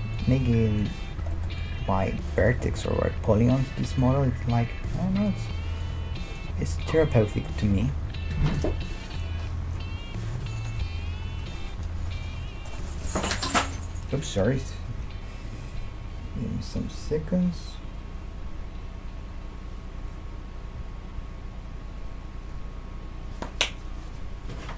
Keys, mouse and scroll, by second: 0.4 g, 1.8 g, 3.4 g, 4.3 middle click, 4.6-7.3 right drag, 4.8 g, 6.1 g, 7.3-9.1 middle drag.